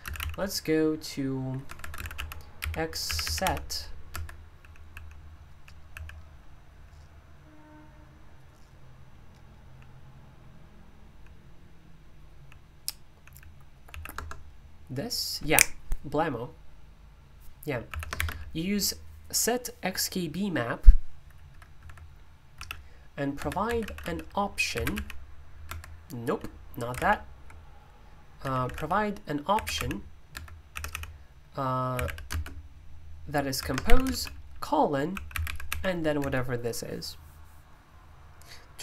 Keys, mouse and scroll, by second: 0.0 space, 1.4-6.6 typing, 4.1 Escape, 9.6 typing, 11.0 typing, 12.1-14.3 typing, 17.9 typing, 21.8 Escape, 22.5-25.4 typing, 23.3 Escape, 25.6 Escape, 26.7-32.7 typing, 30.3 Escape, 33.5 Escape, 33.8-36.6 typing.